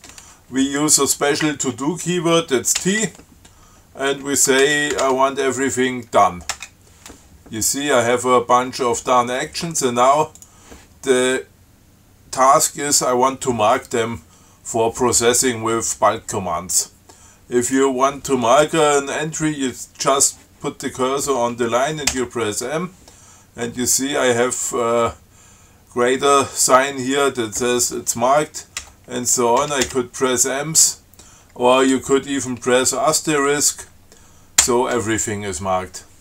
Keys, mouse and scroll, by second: 3.0 shift+t, 4.6-5.7 typing, 6.8 Return, 10.6 click, 17.9 click, 22.4 m, 29.0 m, 29.9 m.